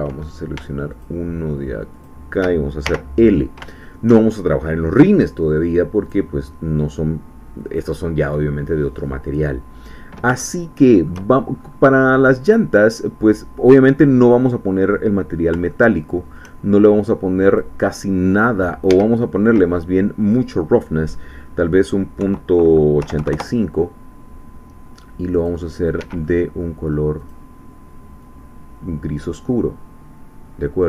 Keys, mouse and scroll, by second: 1.0 shift+click, 2.0 shift+click, 2.8 shift+l, 6.0 click, 9.2-9.6 scroll down 1, 10.5 shift+click, 11.5-12.3 shift+scroll up 2, 13.0-13.3 scroll down 2, 15.7 shift+middle click, 17.5 click, 18.9 Escape, 20.2 click, 23.0 8, 23.2 5, 23.3 Return, 25.4 click, 26.0 Escape, 26.3 middle click, 27.2 click, 28.2-30.8 drag.